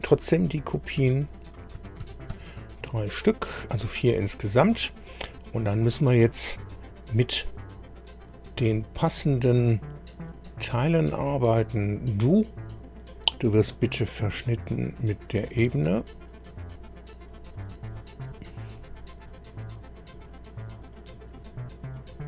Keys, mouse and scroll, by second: 1.0 ctrl+c, 1.8 ctrl+v, 2.0 ctrl+v, 2.3 ctrl+v, 2.8-3.5 ctrl+scroll down 5, 3.8-4.5 scroll up 4, 5.3-5.6 scroll down 2, 7.2 scroll up 2, 7.7 scroll up 2, 10.1 click, 11.3 click, 13.7 scroll up 1, 15.0 ctrl+click, 17.5 click, 19.4-20.1 scroll down 1, 20.8 click, 21.3 scroll down 2, 22.0 click.